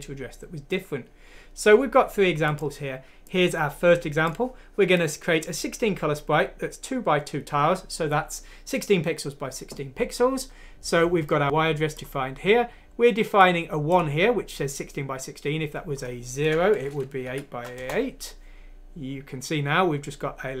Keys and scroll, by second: 16.8 0, 17.3 F6, 17.7 Return.